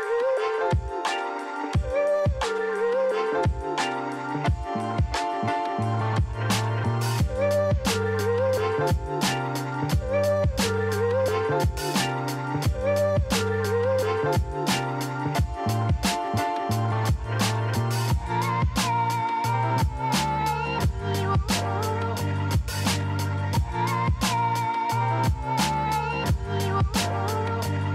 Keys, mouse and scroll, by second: 0.6 KP_0, 0.9 KP_1, 1.1 Return, 2.4 click, 3.0 KP_0, 3.3 Return, 4.3 click, 5.7 KP_0, 6.0 KP_2, 6.3 Return, 8.2 click, 9.4 KP_0, 9.6 KP_3, 10.0 Return, 10.9 click, 12.1 KP_0, 12.3 KP_2, 12.6 Return, 13.6 click, 15.3 KP_0, 15.5 KP_2, 15.8 Return, 18.2 click, 20.3 click, 21.6 click, 23.0 click, 25.7 click, 26.4 KP_7, 26.6 KP_5, 26.8 KP_0, 27.2 Return.